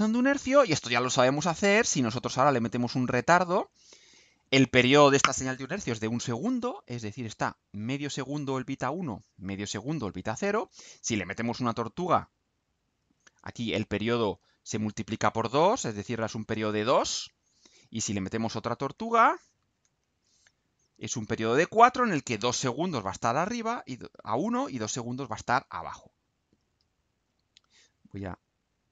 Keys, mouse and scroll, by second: 3.2 click, 4.2 click, 10.6 click, 12.3-13.2 drag, 15.0-16.6 drag, 18.4 click, 18.9 click, 19.6 ctrl+c, 20.0 ctrl+v, 20.6-22.2 ctrl+drag, 23.0-24.0 drag, 24.3 click, 25.7-27.0 right drag.